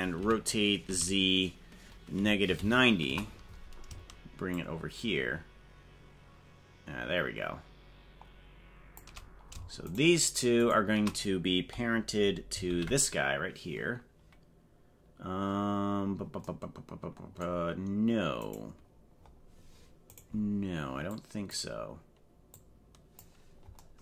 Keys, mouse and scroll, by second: 0.2 r, 4.5-9.0 shift+drag, 10.0 shift+right click, 10.6 shift+right click, 12.6 ctrl+p, 15.6-16.2 scroll down 8, 18.4 right click, 19.1-19.8 scroll up 6, 20.1 right click, 21.1 click, 22.6 click.